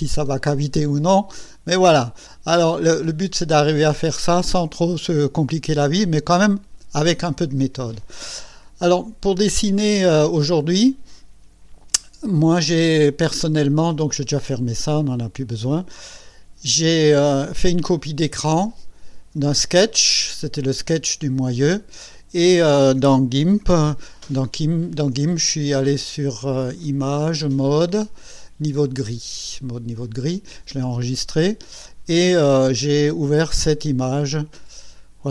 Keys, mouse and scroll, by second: 1.4-3.1 right drag, 3.5-4.6 right drag, 15.0 click, 18.7 click, 23.7 ctrl+z, 26.8 click, 29.9 click, 34.0 click.